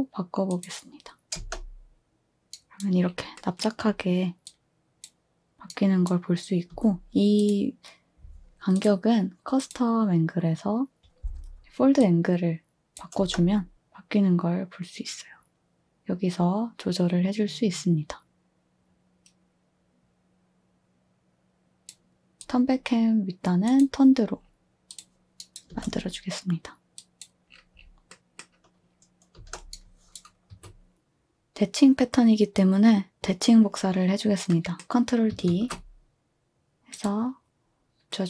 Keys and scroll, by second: 1.4 space, 6.7 space, 13.2 space, 25.7 space, 29.3 space, 30.5 2, 35.5 ctrl+d.